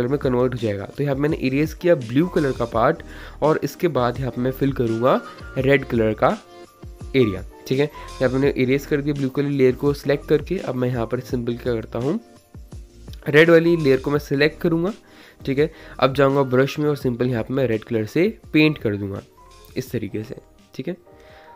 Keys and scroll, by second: 9.1 ctrl+z, 9.2 ctrl+z, 9.3 ctrl+z, 9.3 ctrl+z, 9.8 ctrl+z, 10.0 ctrl+z, 10.8 [, 10.8 [, 10.9 [, 15.1 ctrl+z.